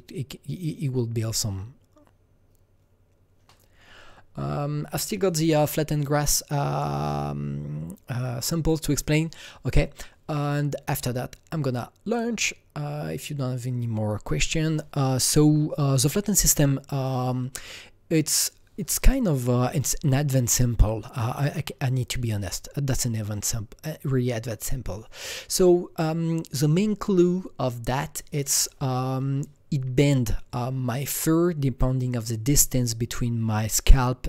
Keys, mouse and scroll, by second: 6.1 scroll down 3, 6.2 click, 9.0 click, 10.9 click, 17.0 click, 18.3 click, 19.4-21.3 scroll down 1, 21.3 scroll down 1, 21.4-21.8 scroll up 1.